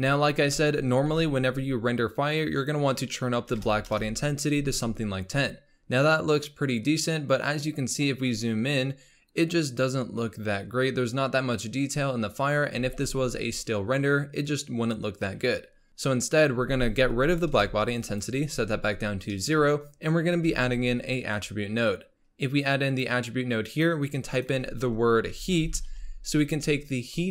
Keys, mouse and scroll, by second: 0.5 z, 1.5-2.4 scroll up 2, 2.4-5.5 drag, 6.6-7.6 scroll up 1, 7.6 scroll up 3, 8.4 scroll up 2, 12.9 z, 13.6-15.9 scroll down 5, 15.9-17.2 middle drag, 17.2-18.2 drag, 19.3-20.5 middle drag, 20.5 shift+a, 24.3-27.3 drag.